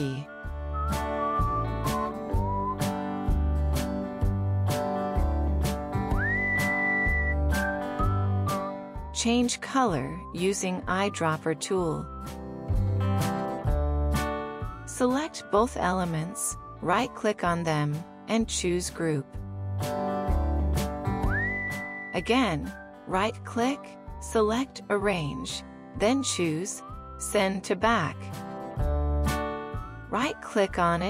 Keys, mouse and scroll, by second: 12.0 ctrl+click, 15.5 double click, 19.0 right click, 22.2 right click.